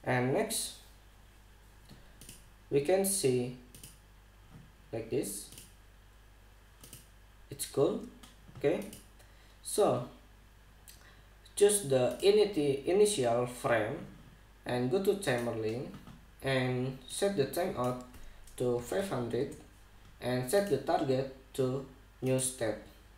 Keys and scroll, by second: 19.2-20.0 typing, 20.0 Return.